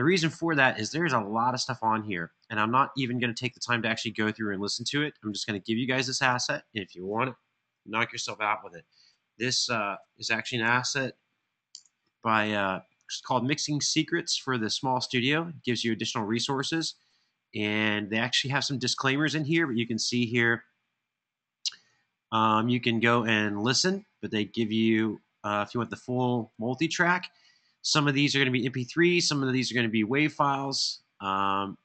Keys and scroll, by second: 7.7 super+c, 10.6 super+v, 11.5 Return.